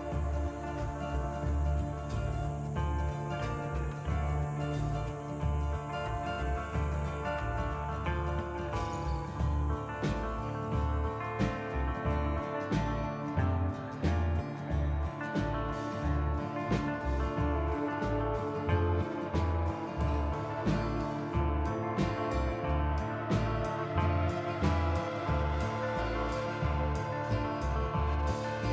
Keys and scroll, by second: 4.7 Tab, 7.3 KP_Divide, 10.5 Tab, 25.7 a, 27.0 u.